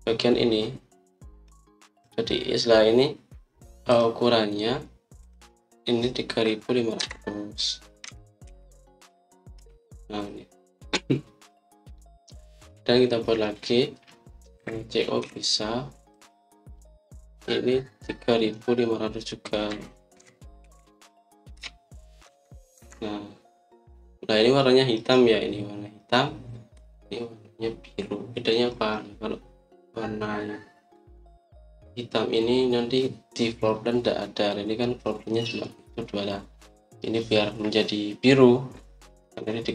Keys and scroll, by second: 7.9 3, 8.9-9.3 typing, 10.5 Return, 13.0 typing, 15.5-16.6 typing, 20.6-23.7 typing.